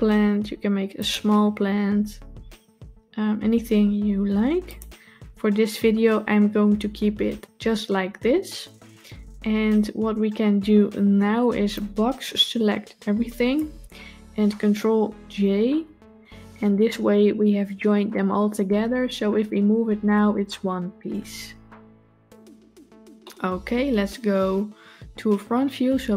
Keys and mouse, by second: 1.5 s, 11.7-13.4 drag, 15.8 ctrl+j, 19.0 g, 23.1-23.6 middle drag.